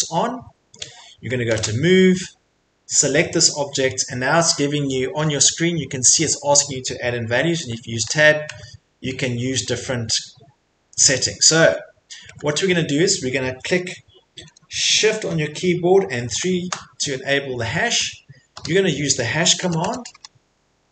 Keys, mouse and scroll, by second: 1.4 m, 1.9 middle click, 3.4 click, 3.7 middle click, 3.7 middle click, 7.5 Tab, 8.0 Tab, 8.5 Tab, 9.0 middle click, 9.3 middle click, 10.3 middle click, 11.6 Tab, 12.3 Tab, 16.3 #, 18.5 Return, 19.6 BackSpace, 19.8 BackSpace, 20.1 `, 20.7 Escape.